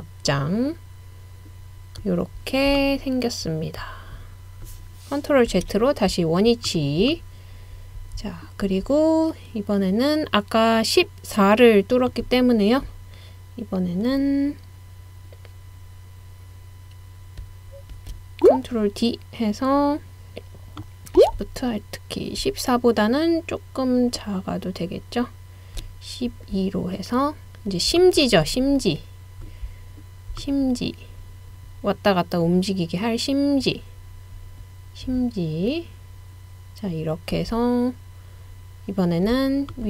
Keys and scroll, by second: 5.5 super+z, 17.9 super+d.